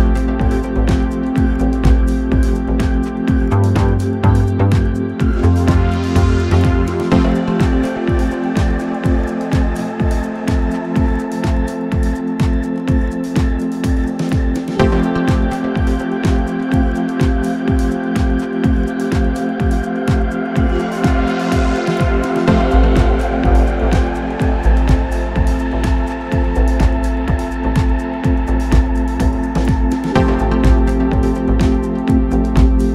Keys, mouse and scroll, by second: 0.0-32.9 drag.